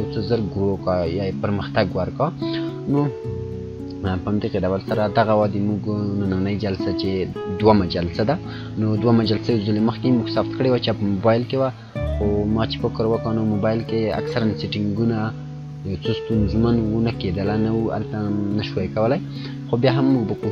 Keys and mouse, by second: 4.9 click, 5.1 click.